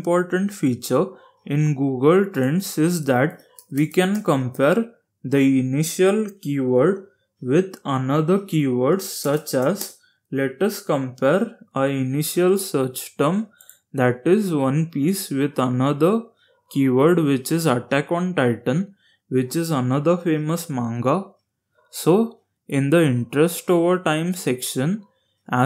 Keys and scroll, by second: 2.0-4.0 typing, 8.1-9.1 typing.